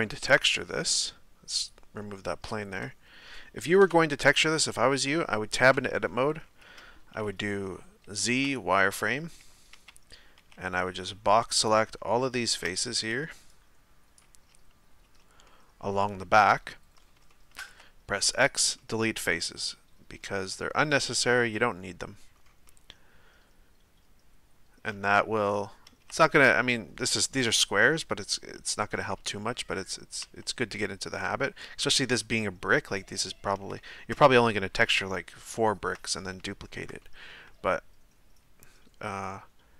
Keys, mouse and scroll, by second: 1.5-2.4 drag, 2.4-3.8 middle drag, 3.8 KP_3, 4.6 Tab, 5.9-6.9 scroll up 1, 8.4 z, 8.5 click, 9.5 a, 9.7 a, 11.7 b, 12.2-14.2 shift+middle drag, 14.2 b, 15.2 z, 15.5-18.4 middle drag, 18.4 x, 18.8-25.4 middle drag, 25.4 z, 26.3 z, 27.0-30.4 middle drag, 30.4 z, 31.2 z, 31.9-34.9 middle drag, 34.9-36.0 scroll up 4, 36.0 scroll down 1, 36.4-39.7 shift+middle drag.